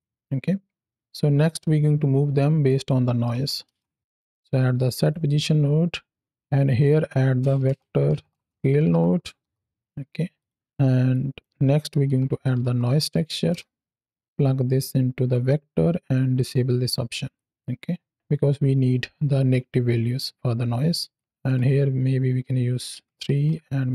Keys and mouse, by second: 2.5 click, 4.9 click, 5.8-6.2 drag, 6.5 drag, 10.2 click, 11.0 click, 14.3 click, 17.0 click, 17.7 click, 21.0 click, 21.3-23.9 drag.